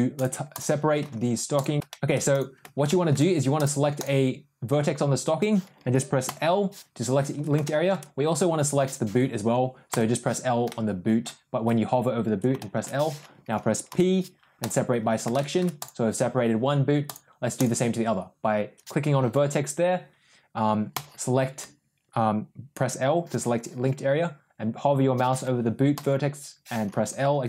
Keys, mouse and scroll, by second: 0.0 click, 0.9 Tab, 1.4 click, 1.8 ctrl+shift+z, 1.8 middle click, 2.2 click, 2.8 middle click, 3.5 click, 6.2 l, 7.5 middle click, 9.8 l, 10.6 middle click, 12.5 middle click, 13.8 p, 15.2 middle click, 15.6 click, 16.9 click, 17.5 click, 20.8 l, 25.8 l.